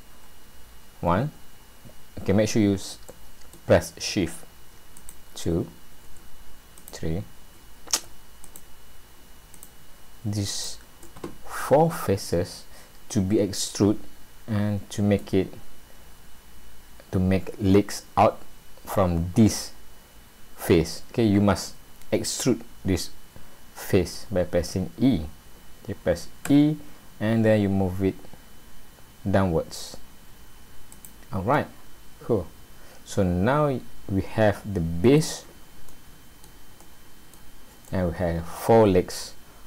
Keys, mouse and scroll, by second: 0.2 scroll down 2, 1.9-2.3 scroll up 1, 3.1 shift+middle click, 5.0 shift+click, 6.8 click, 8.4 shift+click, 9.5 click, 10.5 shift+click, 11.6 middle click, 15.4-15.8 scroll down 2, 20.4-20.9 scroll up 1, 26.5 e, 31.6 middle click, 35.5 scroll down 1, 35.9 middle click, 36.9 middle click, 37.9 middle click.